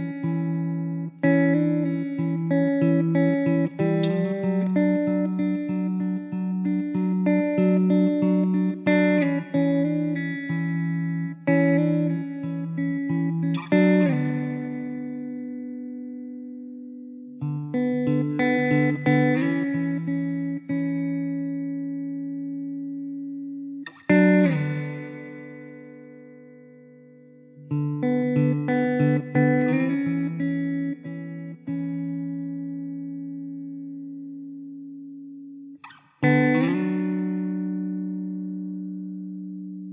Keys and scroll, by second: 1.4 f, 2.6 3, 5.0 Tab, 9.5 Tab, 10.0 2, 10.9 s, 12.3 ctrl+r, 14.9 o, 15.8 Tab, 16.3 Tab, 16.8 3, 20.9 ctrl+z, 21.2 ctrl+z, 22.2 s, 23.0 Tab, 24.4 ctrl+s, 25.2 Tab, 25.8 l, 26.3 alt+z, 27.7 shift+d, 29.1 p, 29.8 Tab, 30.3 alt+z, 31.8 alt+z, 33.5 Tab, 34.1 alt+z, 34.4 3, 35.9 x, 36.5 Tab, 36.9 alt+z, 38.7 Tab, 38.7 2.